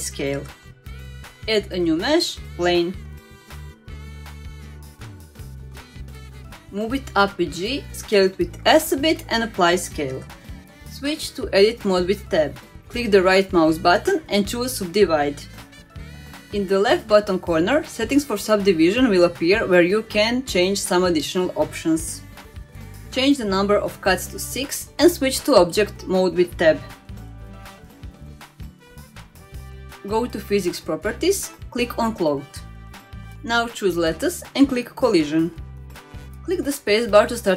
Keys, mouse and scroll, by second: 0.1 click, 0.4 ctrl+a, 1.1 click, 1.4 scroll down 2, 1.6-3.2 middle drag, 3.6-4.2 scroll up 2, 4.6-5.8 drag, 6.1-6.6 scroll down 2, 6.6 g, 9.1 middle click, 9.6 s, 10.8 ctrl+a, 11.6-12.1 scroll up 2, 12.1 Tab, 12.5 middle click, 13.0-14.2 right drag, 17.0 Tab, 17.0 middle click, 17.0 right click, 17.0 click, 22.3 click, 23.9 click, 24.3 click, 24.9 click, 25.6 click, 26.6 click, 27.8 Tab, 28.2-28.9 middle drag, 31.8 click, 33.4 click, 34.5 click, 36.3 click, 37.2 space.